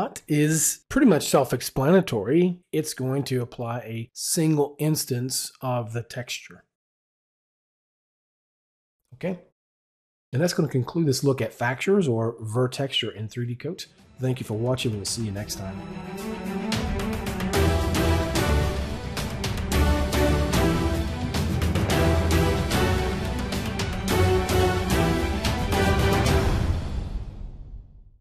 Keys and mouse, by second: 3.3 click, 4.8 click, 5.1 right click, 6.7 right click, 8.6 click.